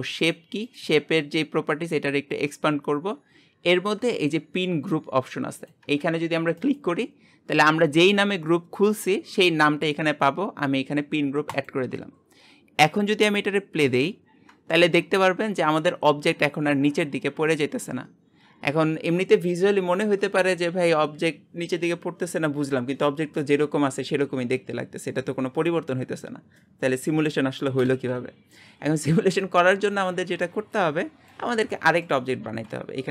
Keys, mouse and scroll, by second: 11.7 click, 13.8 space, 14.3-14.8 scroll down 2, 14.8-17.8 shift+middle drag, 28.0 space, 30.7-31.8 drag, 31.8-33.1 shift+middle drag.